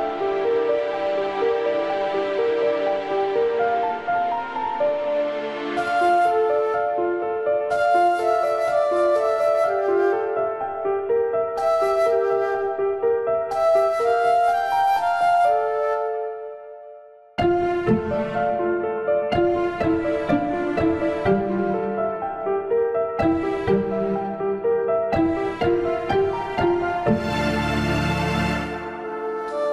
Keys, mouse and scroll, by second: 0.6 click, 1.2 click, 1.9 click, 5.6 ctrl+r, 7.6 a, 8.5 click, 9.3 click, 10.0 shift+click, 10.6 click, 11.3 shift+click, 12.2 KP_1, 12.7 click, 14.0 click, 15.7 click, 16.6 click, 18.2 click, 19.6 click, 20.6 click, 20.9 click, 22.2 click, 23.4 a, 23.5 a, 23.9 click, 24.6 click, 26.0 a, 26.1 a, 26.3 click, 28.2 click, 28.6 click.